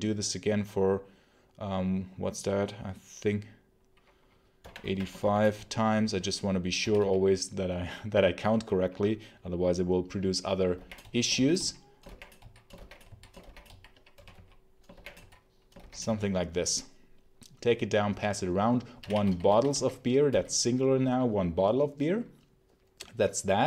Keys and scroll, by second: 4.2-6.7 typing, 10.4-15.9 typing, 18.5-20.9 typing, 21.1 Escape.